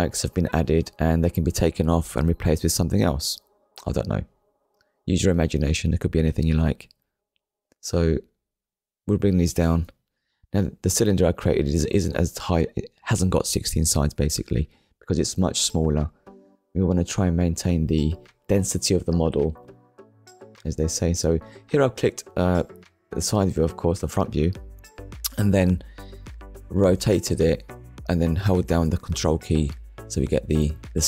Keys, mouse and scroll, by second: 0.9 click, 2.5 shift+middle click, 3.2 scroll up 1, 6.9 click, 7.7 click, 10.2 click, 11.0 middle click, 12.0 KP_1, 12.8 shift+scroll up 1, 13.4 scroll up 1, 14.0 scroll up 1, 14.3 shift+middle click, 15.0-15.3 scroll up 2, 15.3 shift+middle click, 18.1 r, 21.7 ctrl+click, 26.3 scroll down 1, 27.7 shift+middle click, 28.9 click, 29.9 KP_0, 30.2 Return.